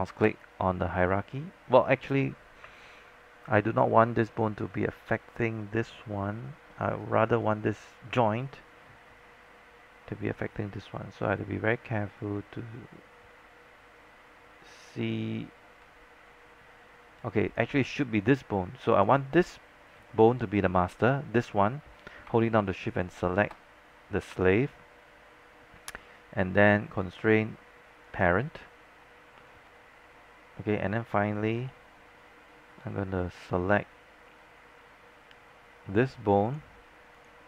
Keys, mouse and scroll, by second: 5.0 scroll down 1, 5.8-6.4 scroll up 1, 7.0-8.6 drag, 23.0 shift+click, 27.1 click, 29.7 scroll down 1, 31.7-33.0 alt+middle drag, 36.6 click.